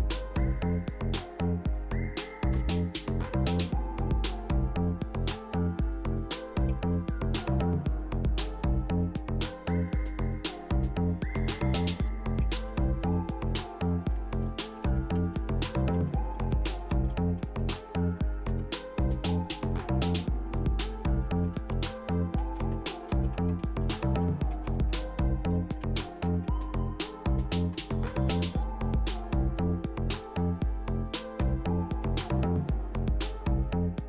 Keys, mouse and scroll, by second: 0.5 click, 1.8 Right, 2.6 Return, 6.7 alt+Tab, 9.1-10.5 scroll down 1, 12.5 alt+Tab, 13.3 alt+click, 13.9-18.3 typing, 18.5 Return, 21.2-27.0 typing, 27.8 Return, 31.4 Return.